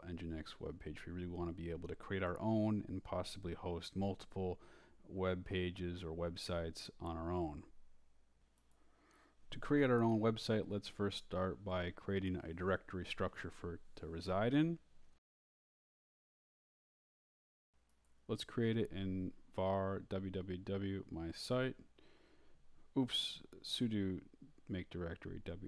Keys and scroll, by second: 8.1 Return, 12.7-16.9 typing, 15.0 Return, 19.0-20.7 typing, 21.4 Return, 22.3-25.0 typing.